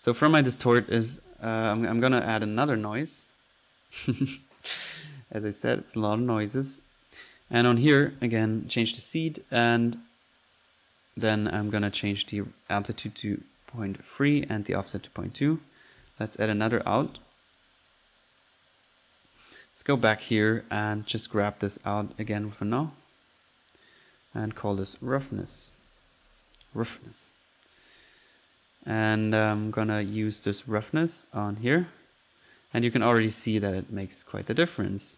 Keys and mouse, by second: 0.3-1.8 typing, 2.0-2.3 drag, 2.5 click, 3.3-3.6 drag, 4.0 click, 8.8 drag, 12.3 click, 14.5 click, 15.7-16.3 middle drag, 16.4 right click, 16.6 right click, 16.7-17.5 typing, 17.9 drag, 18.4 drag, 18.7 click, 20.1 middle click, 20.4-21.0 drag, 21.6 right click, 21.9-22.7 typing, 23.0 click, 23.5 click, 23.7 click, 24.1 click, 27.1-27.5 drag, 28.2 click, 29.0 click, 29.8-30.2 drag, 30.8 click, 32.3 click, 32.7 click, 33.5 click, 33.7 click, 34.5 click, 35.0 F1.